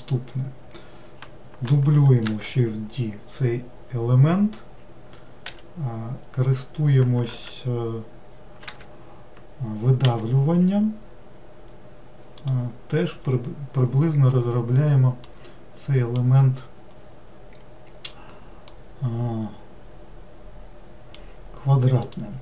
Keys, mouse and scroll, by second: 2.3 shift+d, 10.1 e, 13.2-13.9 scroll up 1, 13.9-15.2 scroll down 1, 15.2 scroll down 1, 15.3-18.4 middle drag, 18.7-21.7 middle drag, 22.1 click.